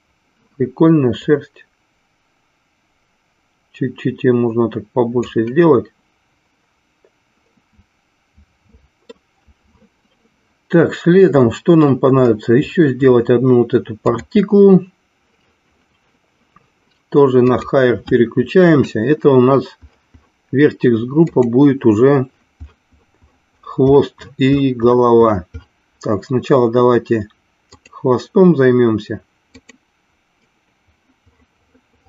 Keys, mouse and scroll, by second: 1.3-6.1 drag, 7.7-9.4 middle drag, 14.0 click, 18.2 click, 21.2-28.5 drag, 29.8-32.0 drag.